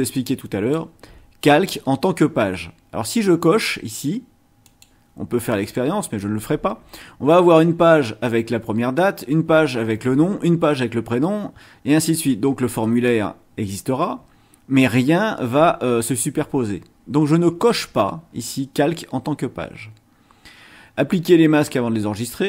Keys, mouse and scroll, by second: 4.6 click, 5.5 click.